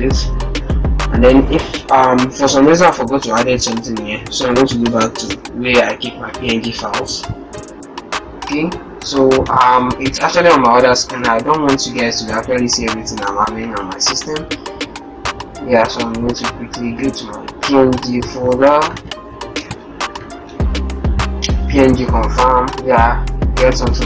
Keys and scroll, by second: 3.8 super+e.